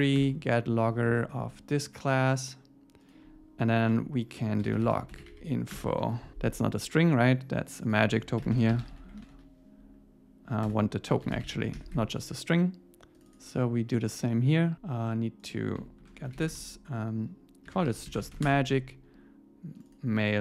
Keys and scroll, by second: 1.1 Tab, 3.9 Down, 5.7 Return, 11.7 Escape, 16.0 super+Left.